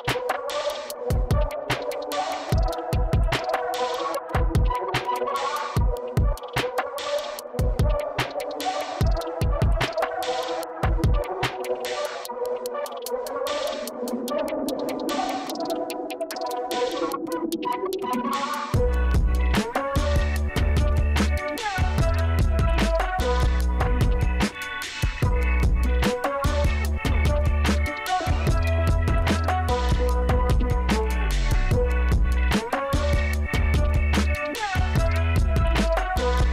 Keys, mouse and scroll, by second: 4.9 click, 8.6 click, 10.2 click, 11.1 click, 12.6 middle click, 13.1 middle click, 13.7 middle click, 17.8 click, 20.6 click, 23.9 click, 24.2 middle click, 27.5 click, 28.3 click, 29.6 click, 32.0 click.